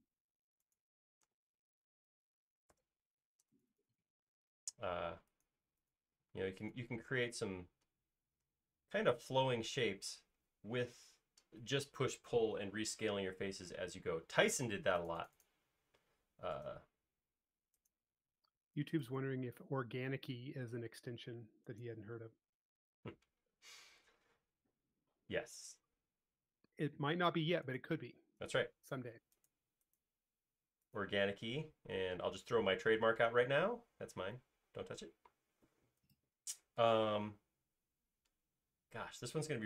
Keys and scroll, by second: 3.1 BackSpace, 6.3 space, 20.1 m, 22.3 m, 28.5 q, 31.4 space, 34.9 e, 35.1 space.